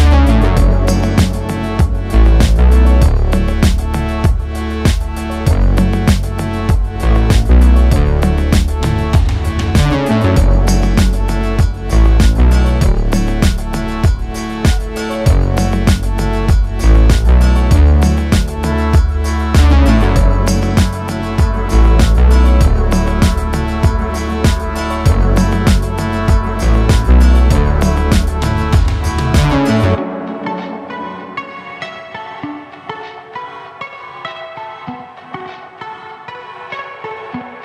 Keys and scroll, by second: 1.4 KP_1, 2.9 e, 16.9 KP_1, 23.6 e, 26.0 s, 29.1 e, 31.7 e, 34.1 s, 36.9 e.